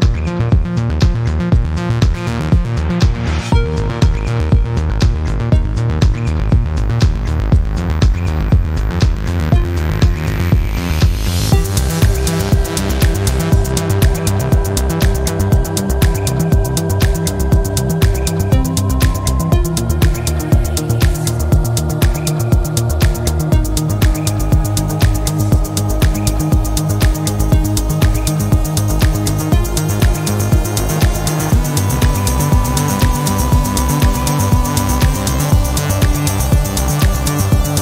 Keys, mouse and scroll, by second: 0.5-1.9 drag, 3.0 click, 4.3-5.6 drag, 6.5 click, 7.3-7.7 scroll down 2, 8.5 scroll up 2, 9.4 click, 11.3 click, 12.6-13.7 drag, 14.9 click, 16.1 click, 17.8 click, 19.1-20.5 drag, 21.3 click, 22.5 click, 24.1 click, 25.2 click, 26.8 click, 27.7-28.1 scroll down 2, 28.3-28.7 scroll up 2, 29.5-30.9 drag, 31.7 click, 32.7-33.2 scroll down 1, 33.4 scroll up 1, 34.6 click, 36.5 click, 37.3-37.8 drag.